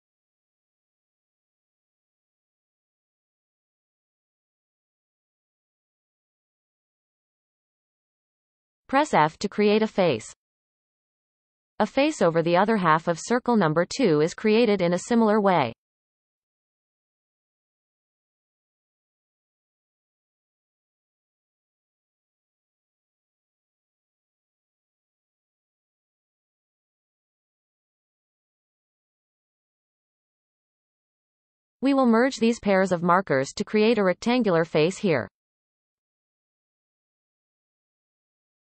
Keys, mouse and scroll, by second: 1.2 shift+click, 2.0 shift+click, 2.5-3.5 shift+drag, 3.8-4.2 scroll down 1, 4.2-7.2 shift+middle drag, 7.7-8.7 shift+middle drag, 8.7 f, 9.2-9.5 scroll down 2, 9.5-10.8 shift+middle drag, 10.8 alt+a, 11.5 b, 14.6-20.2 shift+middle drag, 20.2-20.7 scroll up 3, 20.7-22.2 shift+drag, 22.2-22.6 scroll up 3, 22.6 shift+drag, 22.8-23.5 scroll down 18, 23.5 shift+middle click, 23.7-24.2 scroll up 5, 24.2-24.6 scroll down 7, 24.6-26.4 shift+middle drag, 26.4 f, 27.1-27.7 scroll down 1, 27.7-28.8 shift+middle drag, 28.8 alt+a, 29.6-30.2 shift+middle drag, 30.2-30.9 scroll up 4, 31.4 click, 31.8 shift+drag, 33.1 m, 36.6 click, 37.0 shift+click, 37.8 m.